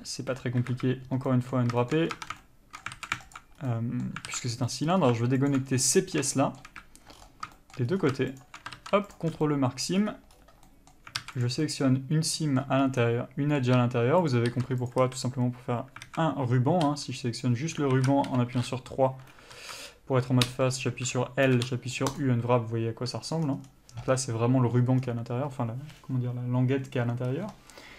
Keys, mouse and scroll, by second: 0.1 Tab, 0.9 KP_Decimal, 1.5 middle click, 2.1 shift+middle click, 2.3 scroll up 1, 2.4 Tab, 2.7 shift+middle click, 3.2 alt+a, 3.6 alt+click, 3.8 scroll up 1, 3.9 middle click, 4.5 alt+a, 4.6-4.9 alt+scroll up 2, 5.0 middle click, 5.7 alt+click, 5.9 scroll down 1, 6.1 middle click, 6.6 shift+middle click, 7.4-7.8 scroll up 1, 7.8 shift+middle click, 8.1 scroll up 1, 8.7 alt+shift+click, 9.4 ctrl+e, 9.5 scroll down 1, 9.7 middle click, 10.2-10.6 scroll up 1, 10.9 middle click, 11.4 alt+a, 11.6 click, 11.9 middle click, 13.1 scroll up 1, 13.2 middle click, 14.6 ctrl+click, 15.2 ctrl+e, 15.3 a, 16.3 alt+a, 17.2 l, 18.2 alt+a, 18.5 3, 19.8 alt+z, 20.7 l, 22.4 u, 23.8 scroll down 1.